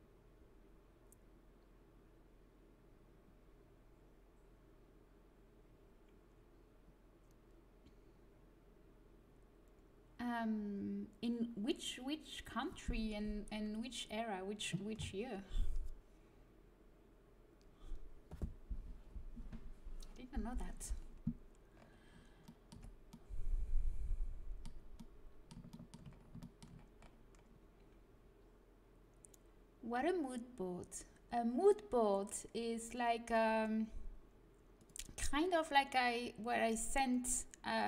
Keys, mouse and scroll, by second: 22.6 Tab, 26.1-30.5 middle drag.